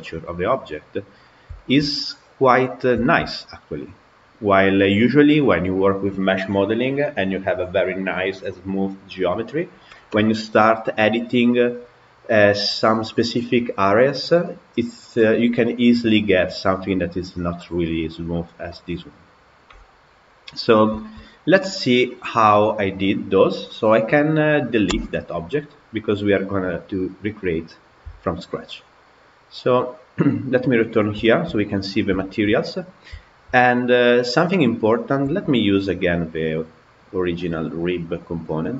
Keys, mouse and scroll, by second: 0.1-2.5 middle drag, 2.5 scroll up 1, 2.9-4.2 shift+middle drag, 4.2-4.5 scroll down 1, 4.5-17.3 middle drag, 18.6-20.3 middle drag, 20.3 scroll down 2, 20.8-22.1 shift+middle drag, 22.1 click, 24.9 Delete, 28.4 click, 30.5 click, 31.1-32.4 shift+middle drag, 32.4-33.1 scroll up 4, 33.1-33.4 shift+middle drag, 33.4 scroll down 2, 33.6-35.4 middle drag, 35.4 Tab, 35.7-37.3 middle drag, 37.3 click, 38.4-38.7 drag.